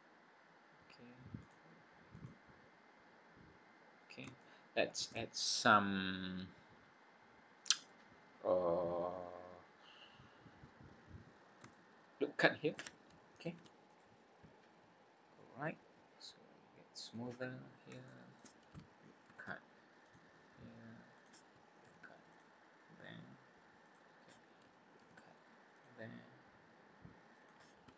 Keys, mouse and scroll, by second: 1.3 click, 2.1 click, 4.4 shift+middle click, 8.3 scroll down 2, 9.1-9.5 scroll down 3, 9.6 scroll up 2, 11.3 scroll up 2, 11.7 shift+middle click, 13.5 ctrl+r, 17.3 scroll up 1, 18.0 shift+middle click, 19.3 ctrl+r, 21.9 ctrl+r, 25.0 ctrl+r.